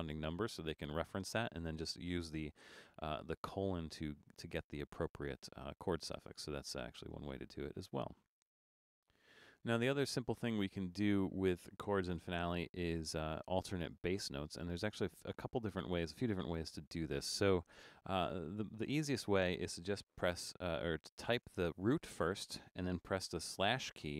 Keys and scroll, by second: 12.3 BackSpace, 21.5 shift+d, 23.6 /.